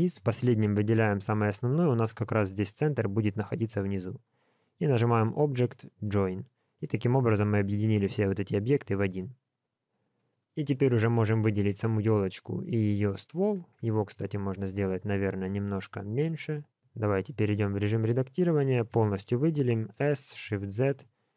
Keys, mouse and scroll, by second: 0.0 click, 4.9 click, 12.2 shift+click, 13.8 Tab, 16.7 Tab, 16.7 click, 19.1 a, 20.0 s.